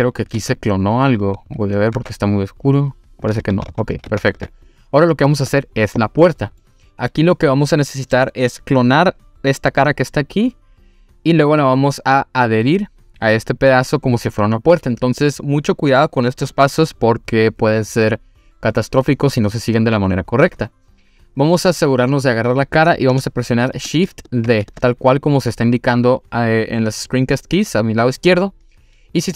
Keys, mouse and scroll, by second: 0.0-0.4 scroll up 1, 0.4 s, 1.2 click, 1.7 click, 2.0 s, 3.2 click, 3.5 ctrl+z, 3.7 ctrl+z, 4.7 click, 5.0-5.6 scroll down 1, 6.2 scroll down 1, 6.2 middle click, 9.5 click, 21.7-23.0 scroll up 2, 24.5 shift+d.